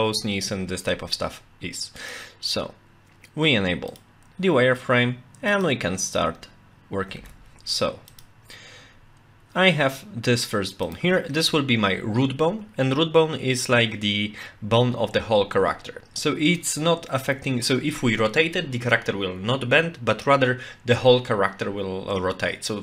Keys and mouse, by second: 2.1-4.4 drag, 5.5 click, 10.9 click.